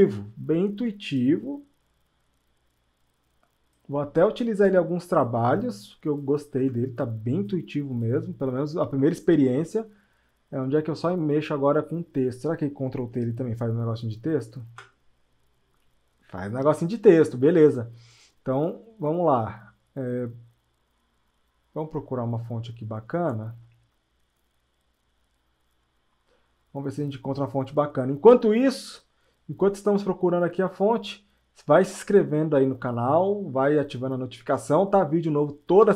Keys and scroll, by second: 6.6 Return, 14.6 ctrl+t.